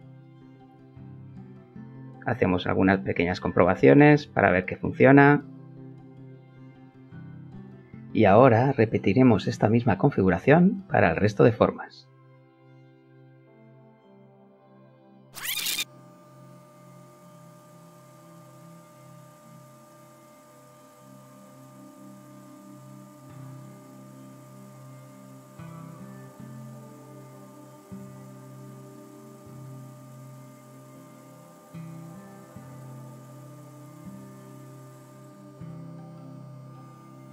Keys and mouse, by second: 1.3 ctrl+t, 3.1 Tab, 9.4 Escape, 13.9 click, 14.6 click, 15.2 click, 16.0 right click, 16.2 click, 16.6 click, 17.0 click, 17.1 click, 18.2 click, 19.2 Return, 19.9 click, 20.2 click, 20.3 click, 21.7 Return, 22.0 middle click, 23.3 click, 23.8 click, 25.7 middle click, 26.9 click, 28.5 click, 28.7 click, 30.2 Return, 30.3-33.4 middle drag, 31.1 click, 33.4 click, 33.9 click, 34.3 Return, 34.8 right click, 37.2 Return.